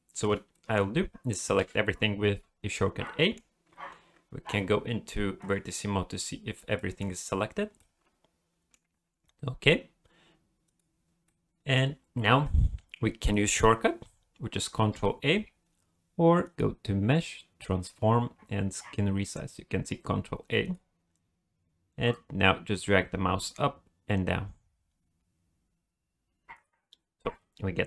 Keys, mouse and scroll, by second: 0.5 middle click, 1.6 a, 3.0 middle click, 6.3 click, 6.7 middle click, 7.8 middle click, 10.7 click, 11.2 middle click, 16.4 click, 27.4 middle click.